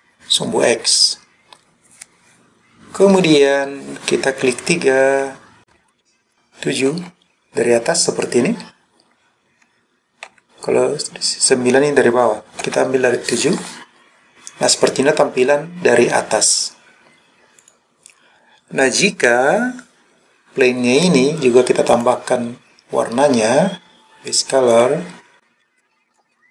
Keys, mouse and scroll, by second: 5.1 KP_2, 7.0 KP_7, 10.3 KP_9, 12.7 KP_7, 17.6 click, 21.9 click, 24.7 click.